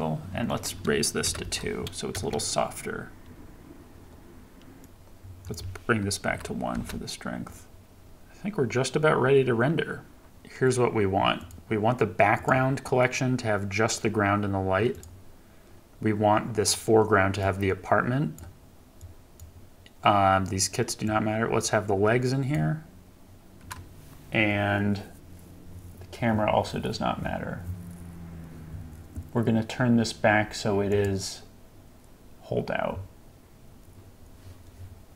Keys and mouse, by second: 0.6 click, 2.1 KP_0, 5.5-6.7 drag, 11.4 click, 17.4 click, 19.1 click, 21.2 click, 30.9 click.